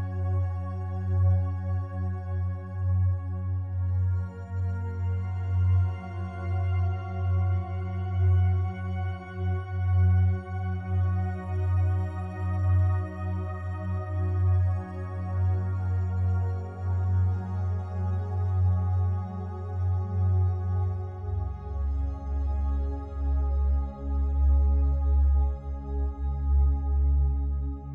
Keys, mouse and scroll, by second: 1.1 ctrl+click, 1.9 ctrl+alt+click, 2.5 ctrl+click, 3.3 ctrl+click, 4.1 ctrl+alt+click, 4.6 ctrl+click, 5.3 ctrl+alt+click, 6.0 ctrl+click, 6.8 alt+click, 7.3 alt+click, 7.6 alt+click, 8.6-9.8 shift+drag, 9.9 ctrl+click, 11.0 ctrl+alt+click, 11.5 ctrl+alt+click, 12.2 ctrl+alt+click, 13.1 ctrl+alt+click, 13.7 ctrl+alt+shift+click, 14.4-15.5 shift+drag, 15.6-16.8 ctrl+drag, 16.9 ctrl+click, 18.2 alt+click, 18.9 alt+click, 20.6-22.9 ctrl+alt+drag, 22.9 1, 23.6 ctrl+alt+click, 24.1 ctrl+click, 25.3 t.